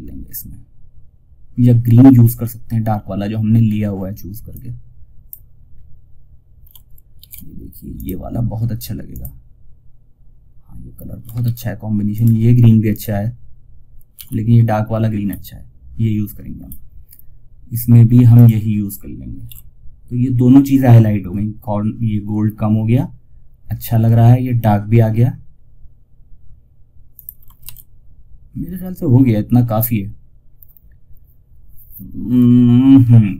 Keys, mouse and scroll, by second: 2.2 scroll down 1, 3.8 click, 5.0-5.4 scroll down 1, 6.5 ctrl+alt+s, 7.3 click, 10.7 ctrl+alt+shift+s, 11.4 click, 13.5 ctrl+z, 14.6 scroll up 1, 17.7 click, 18.8 ctrl+r, 22.9 scroll down 1, 26.9 shift+F2.